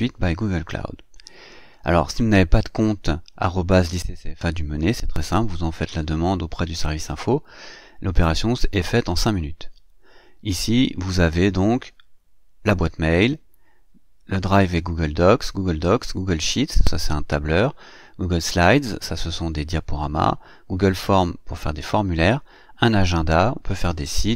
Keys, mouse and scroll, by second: 1.6 click.